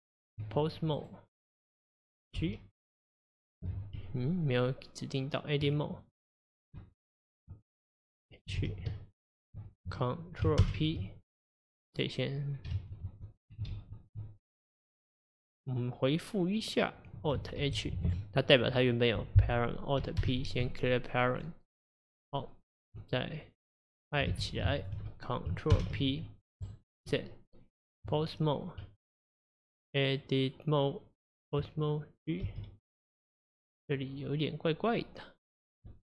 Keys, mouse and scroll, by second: 0.4 Tab, 1.0 click, 1.5 click, 2.4 g, 5.6 Tab, 6.1 click, 8.6 h, 9.1 shift+click, 12.8 ctrl+z, 13.0 ctrl+z, 17.6 alt+h, 18.1 click, 21.4 alt+p, 24.3 h, 24.8 shift+click, 28.1 Tab, 32.5 g.